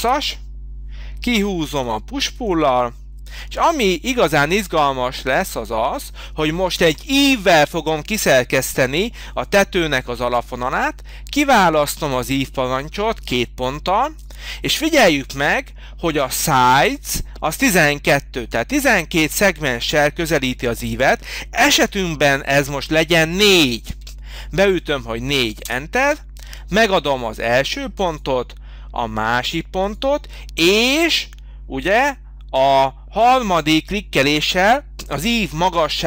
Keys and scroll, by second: 0.0 Return, 1.3 p, 23.9 4, 25.7 Return.